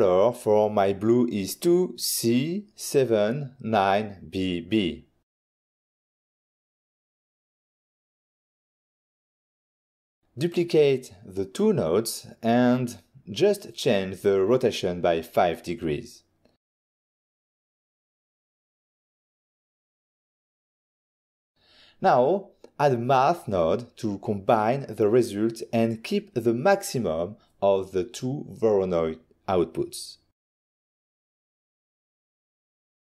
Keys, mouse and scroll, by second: 0.4 middle click, 1.0 middle click, 1.4 click, 1.7 click, 2.0 click, 2.9 2, 3.9 shift+c, 5.0 7, 6.3 9, 7.0 shift+b, 8.4 Return, 10.8 middle click, 11.2 middle click, 11.3 click, 11.4 click, 11.6 middle click, 13.3 click, 13.5 click, 13.6 middle click, 15.4 ctrl+shift+d, 16.5 click, 16.9 middle click, 17.5 middle click, 18.9 click, 19.6 typing, 20.2 Return, 21.2 middle click, 21.5 middle click, 22.5 shift+a, 22.8 click, 23.6-24.1 typing, 27.2 Return, 29.0 click, 30.1 click, 30.2 click, 31.2 click, 32.5 click.